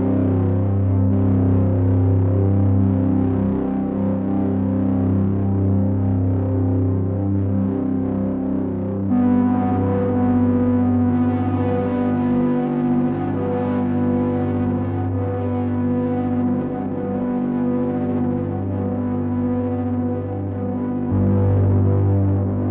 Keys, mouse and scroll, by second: 1.7 ctrl+right click, 9.1 ctrl+right click, 17.7 click, 19.7 ctrl+right click.